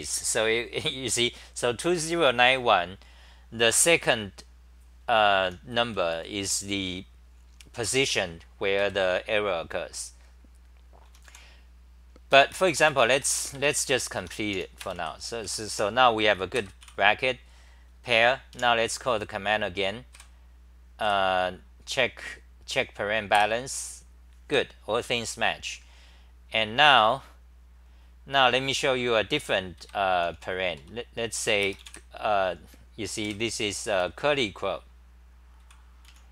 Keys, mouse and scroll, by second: 5.2-6.9 typing, 8.8 ctrl+g, 10.9-12.5 typing, 13.5 Home, 14.5 t, 15.0 Delete, 15.4 c, 15.7 2, 16.6 ctrl+g, 16.8 c, 18.6 a, 20.1 Up, 23.4 Return, 27.3-28.2 scroll down 11, 27.7 typing, 29.8 ctrl+g, 30.2 t, 30.3 t, 30.8 Return, 33.3 super+=, 35.6-36.3 typing.